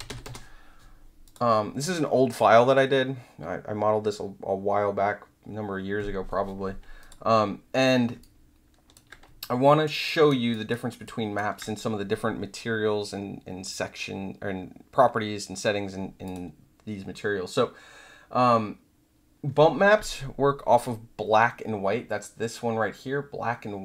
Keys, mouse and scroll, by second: 0.0-0.4 typing, 1.2 click, 7.0 click, 8.2-8.9 alt+drag, 9.4 alt+click, 10.0 alt+right click, 10.5 alt+click, 11.0 alt+drag, 16.2 click.